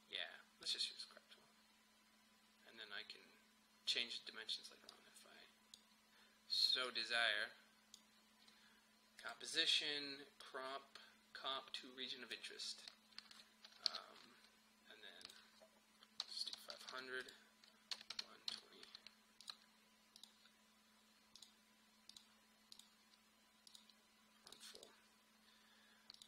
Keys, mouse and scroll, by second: 13.9 ctrl+k, 15.2 click, 16.2-19.0 typing, 17.2 click, 19.4 click.